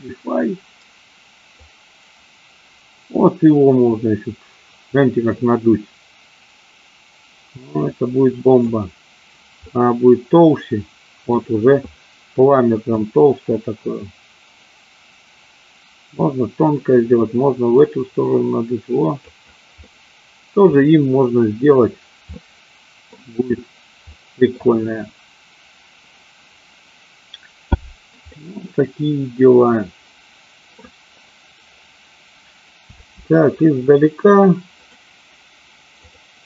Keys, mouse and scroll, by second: 1.7-8.9 drag, 9.7-11.5 middle drag, 13.0-19.5 drag, 19.9 middle click, 22.5 middle click, 24.3-24.8 middle drag, 28.4-31.0 middle drag, 32.9 space, 34.9-36.4 drag.